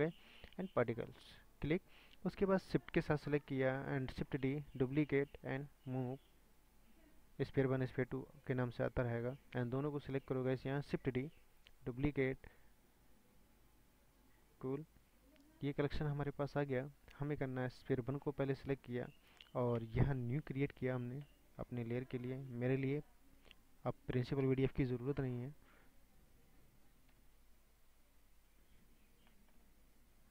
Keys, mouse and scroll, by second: 2.7 click, 4.4 shift+d, 5.4-10.1 drag, 11.7 shift+d, 12.4-13.3 scroll down 1, 13.3-18.1 drag, 18.5-19.1 scroll up 6, 20.9 drag, 21.7-24.4 scroll down 4, 24.4 Delete, 24.9 scroll up 1, 27.3 ctrl+z, 27.8-30.3 scroll up 6.